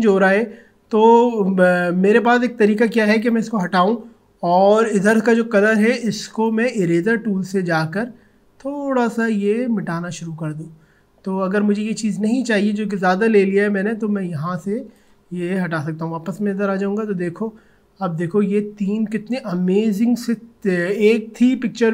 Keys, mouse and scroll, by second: 3.2 click, 6.4-16.2 drag, 17.7-18.0 alt+scroll down 2, 19.1 alt+scroll up 1, 19.3-19.7 alt+scroll down 1, 21.1 alt+scroll up 1.